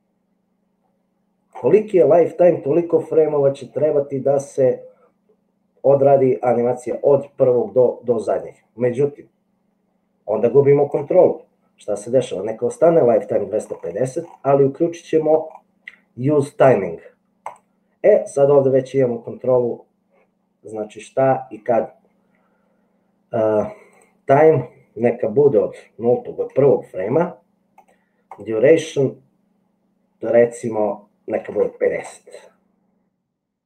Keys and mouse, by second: 8.7 click, 9.4 middle click, 9.9-11.1 drag, 24.0-33.5 drag.